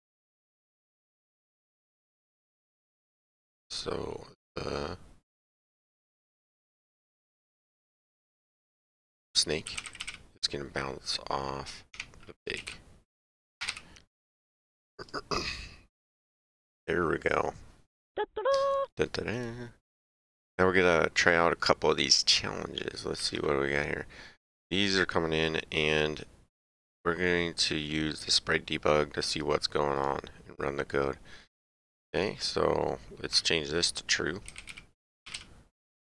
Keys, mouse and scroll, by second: 1.1 click, 10.0 k, 11.9 Tab, 12.6 p, 13.6 BackSpace, 13.7 g, 14.9 click, 19.3 ctrl+Page_Down, 22.1 ctrl+Page_Down, 23.2 click, 28.2 click, 30.0 click, 31.4 click, 33.3 click.